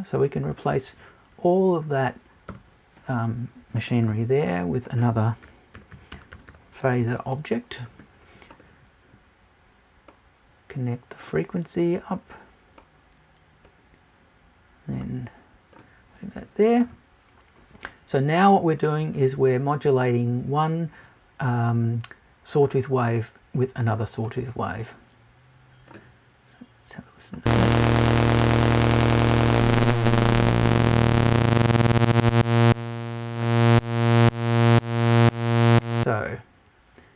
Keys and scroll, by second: 2.5 BackSpace.